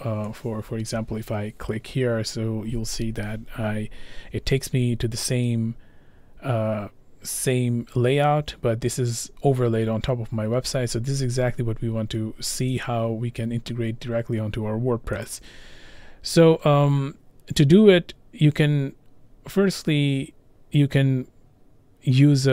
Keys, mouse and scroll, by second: 0.7 click, 12.9 click, 15.3 click.